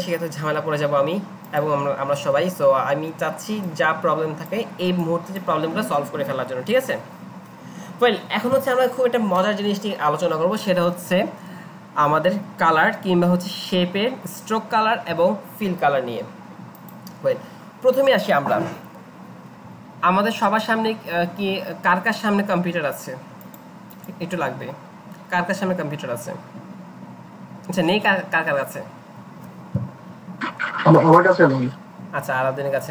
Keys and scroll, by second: 2.2 Delete.